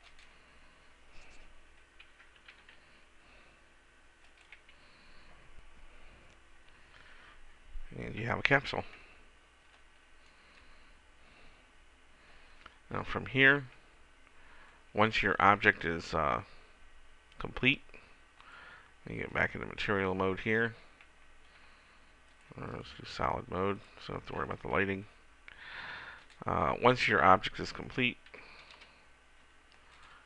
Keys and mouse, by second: 2.9 r, 18.8 click, 23.5 click, 26.6-28.3 middle drag, 28.7 Delete.